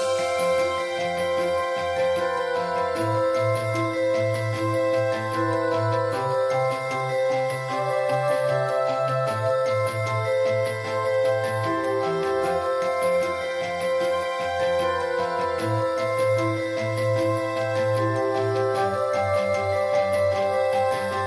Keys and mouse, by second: 0.2 shift+space, 0.5 alt+s, 0.9 shift+space, 1.1-1.5 middle drag, 1.7-2.2 middle drag, 2.3-3.6 middle drag, 3.6-3.9 drag, 3.9 middle click, 4.0-5.1 drag, 5.1 middle click, 5.6-6.8 middle drag, 6.9 middle click, 7.2 click, 7.9-8.2 middle drag, 8.7 ctrl+s, 10.1 ctrl+s, 10.3 shift+space, 10.6 alt+s, 11.0 shift+space, 11.3 ctrl+s, 12.9 ctrl+s, 13.9-15.4 middle drag, 14.5 x, 15.7-16.0 ], 16.1 shift+right click, 17.1-18.8 drag, 18.8-19.5 middle drag, 19.5-20.5 drag, 20.3 l, 20.5 l, 21.0-21.2 drag.